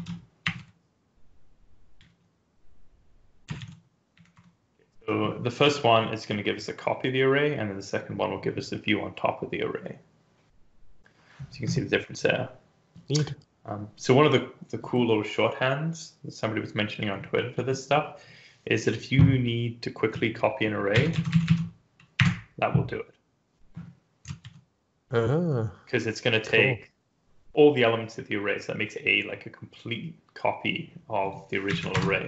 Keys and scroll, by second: 0.3 BackSpace, 0.4 a, 2.0 alt+shift+f, 3.6 ctrl+s, 4.0 Up, 4.3 Return, 20.9 Delete, 21.1 Right, 21.2 Right, 21.3 Right, 22.0 BackSpace, 24.3 ctrl+s, 31.9 Up, 31.9 Return.